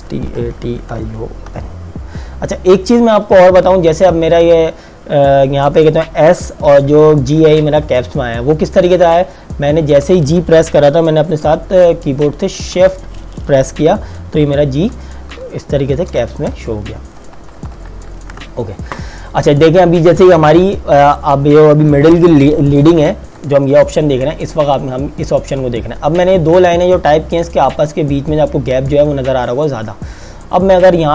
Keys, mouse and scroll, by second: 0.0-2.1 typing, 18.4 KP_Enter, 20.3 click.